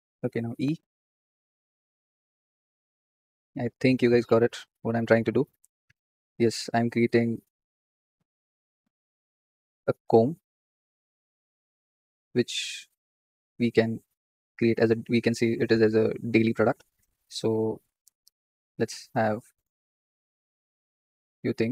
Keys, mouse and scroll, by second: 0.4 e, 4.0-5.4 shift+middle drag, 5.4-7.5 drag, 8.1 s, 14.0 Tab, 18.9 Tab, 21.6 ctrl+r.